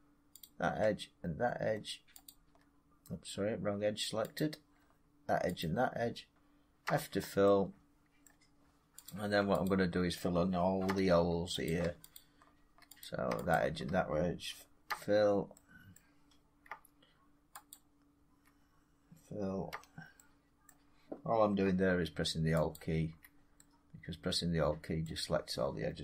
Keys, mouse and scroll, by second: 0.3 click, 2.1 shift+click, 4.2 click, 5.5 shift+click, 6.7 f, 8.1 middle click, 8.9 click, 9.5 shift+click, 10.7 f, 11.5 click, 12.0 shift+click, 12.9 click, 13.4 shift+click, 14.7 f, 15.8 middle click, 17.6 alt+click, 19.6 f, 20.5 middle click, 22.6 alt+click, 24.9 middle click.